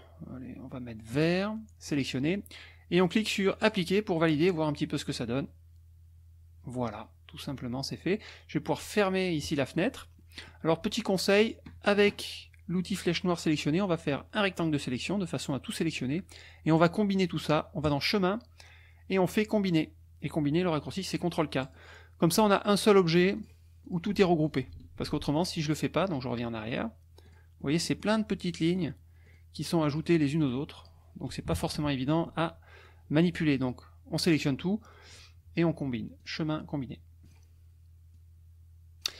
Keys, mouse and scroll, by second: 1.1 click, 1.9 click, 3.6 click, 9.4 click, 10.1 middle click, 12.9 click, 14.1 click, 17.9 click, 21.6 click, 23.3 click, 23.8 click, 24.5 click, 25.0 ctrl+z, 25.3 ctrl+click, 26.7 click, 27.2 click, 27.6 middle click, 27.9 click, 28.7 click, 29.3 click, 29.9 click, 30.4 click, 30.8 click, 31.5 KP_Subtract, 32.8 click, 36.2 click, 37.2 click, 38.1 click.